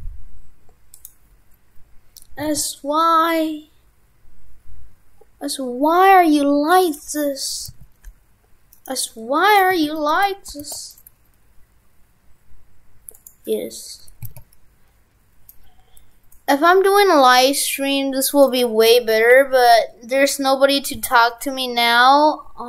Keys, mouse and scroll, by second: 8.9 right click.